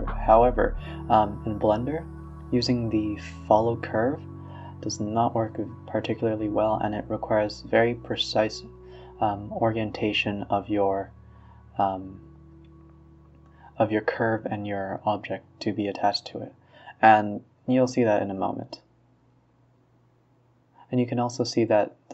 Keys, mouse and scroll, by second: 0.2 click, 0.9 shift+click, 2.5 shift+click, 3.6 ctrl+p, 7.8-9.7 drag, 10.0 r, 11.3 r, 15.2-15.6 middle drag, 15.6 a, 15.7 a, 15.8 scroll up 2, 16.2 click, 16.6 middle drag, 16.9 scroll down 1, 17.1-19.7 middle drag, 19.7-20.1 scroll up 2, 20.1-21.8 middle drag, 22.0-22.1 middle drag.